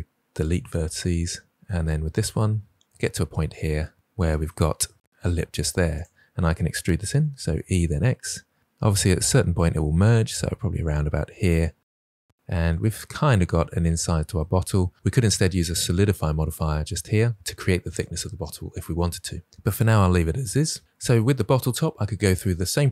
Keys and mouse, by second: 1.6 click, 1.7 g, 2.1 click, 2.3 click, 2.4 g, 3.1 g, 3.6 click, 6.0 drag, 7.1 e, 7.5 x, 11.4 click.